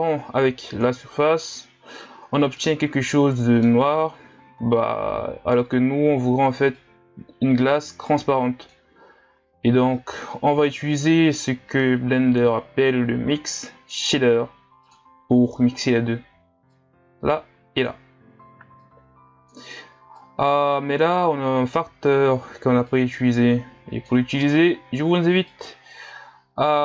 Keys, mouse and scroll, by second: 1.0 click, 2.8-8.9 middle drag, 8.9 click, 10.7-26.8 drag.